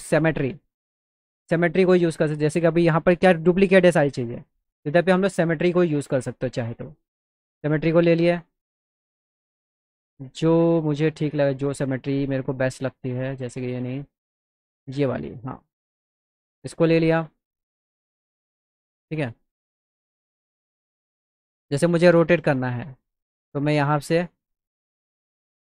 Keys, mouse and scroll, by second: 2.8 middle click, 5.6 click, 6.5 middle click, 7.3 click, 9.8 click, 11.6 click, 14.0 click, 16.1 click, 16.7 click, 18.0-21.3 drag, 21.5 middle click, 22.8 click, 24.1-25.5 drag.